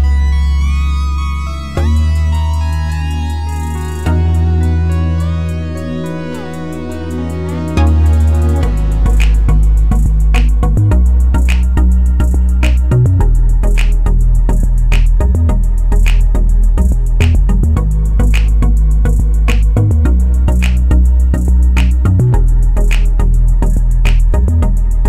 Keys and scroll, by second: 19.6-20.5 typing.